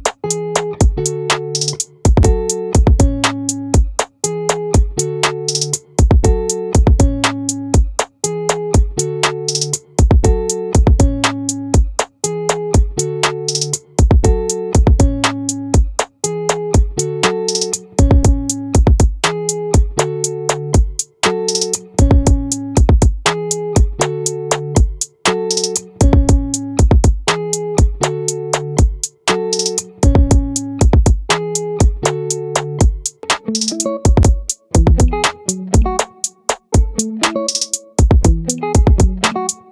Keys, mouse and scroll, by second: 1.8-3.2 right drag, 3.6-5.4 middle drag, 5.4-6.6 scroll up 1, 8.0-9.4 middle drag, 9.4 ctrl+r, 14.8-16.6 drag, 16.6-18.5 right drag, 19.1-20.3 drag, 22.3 x, 27.1 ctrl+z, 29.5 x, 34.3 right click, 35.1 x.